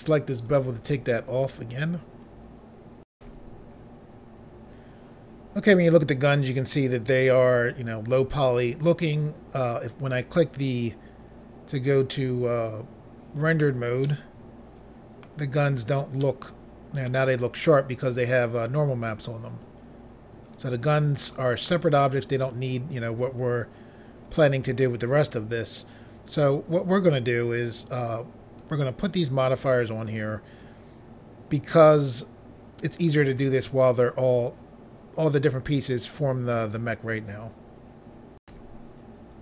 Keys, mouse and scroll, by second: 0.4 click, 3.1 Pause, 10.1 click, 14.0 middle click, 16.2 middle click, 20.4 click, 21.2 middle click, 24.2 click, 28.0 click, 28.6 click, 38.4 Pause.